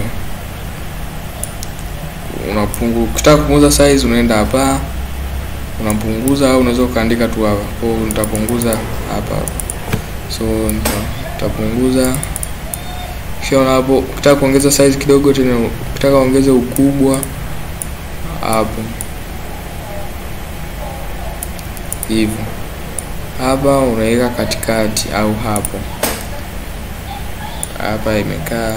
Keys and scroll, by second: 6.8 typing.